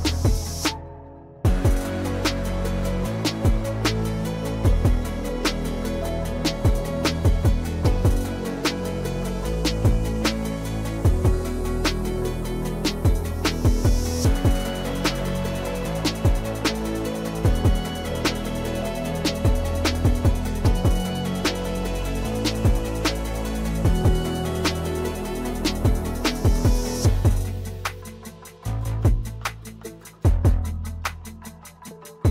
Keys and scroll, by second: 1.0 |, 7.3 e, 8.5 ctrl+z, 10.8 ctrl+z, 12.9 x, 13.7 ctrl+z, 16.4 \, 19.5-21.3 typing, 22.7 ctrl+z, 23.7-25.5 typing, 29.3 F2.